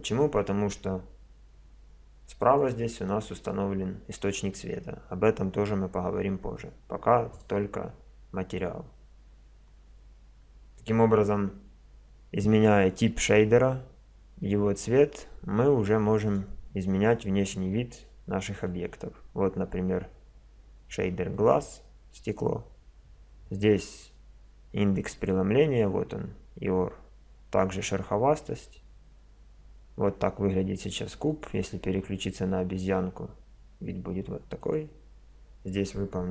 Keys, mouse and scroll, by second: 0.0 Escape, 1.5 KP_0, 7.3 click, 9.0 middle click, 11.2 KP_0, 16.3-18.1 drag, 31.3-33.2 drag, 34.6-36.3 drag.